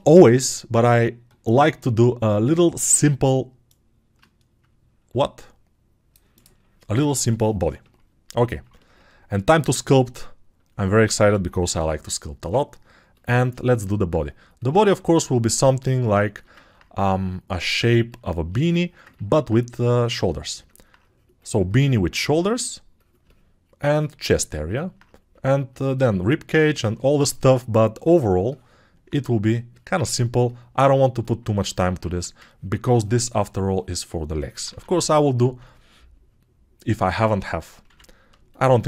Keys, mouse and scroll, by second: 8.4-10.8 ctrl+alt+drag, 8.4-16.6 ctrl+alt+right drag, 13.2-16.6 drag, 35.6 alt+2, 38.0 ctrl+r.